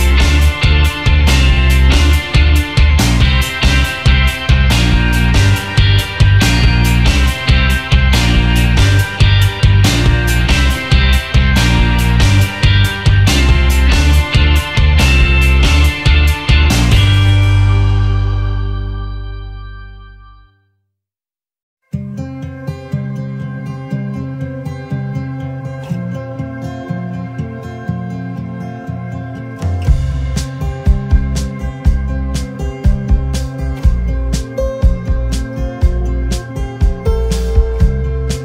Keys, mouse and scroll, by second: 0.3 typing, 1.4 typing, 3.9-4.2 alt+scroll up 1, 4.3 space, 6.2 double click, 8.2 alt+scroll down 1, 9.5 alt+scroll up 1, 10.0-12.0 alt+scroll up 1, 13.3 space, 13.9 alt+scroll up 1, 15.3 alt+scroll down 1, 16.8 space, 19.4 alt+scroll up 1, 20.3 right click, 21.4 double click, 22.5 shift+click, 26.4 alt+shift+click, 28.7 Down, 29.3-31.5 Down, 32.5-33.1 alt+scroll down 1, 33.5 alt+scroll up 1, 34.3 space.